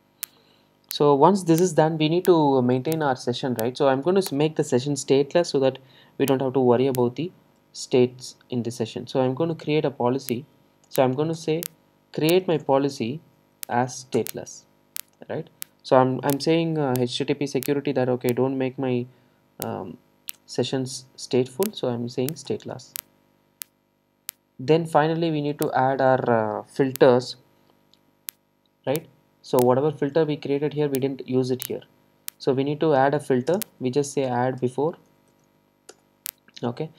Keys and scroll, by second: 4.3 Return, 11.4 Return, 22.5 Return, 33.5 shift+Return.